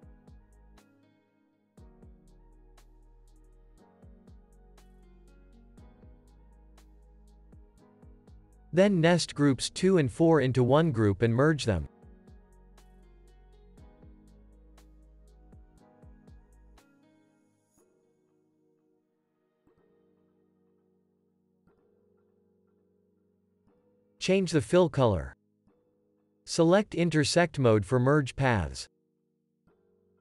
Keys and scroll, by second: 3.3 super+z, 6.3 super+d, 7.8 super+d, 10.1 super+g, 12.2 super+g.